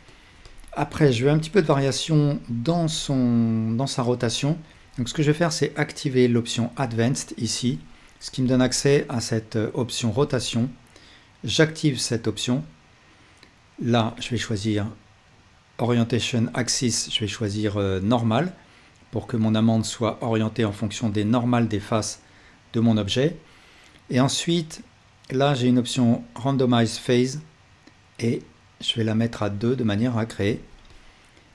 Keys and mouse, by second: 0.4-1.7 alt+drag, 2.2-6.9 drag, 10.2-31.5 drag.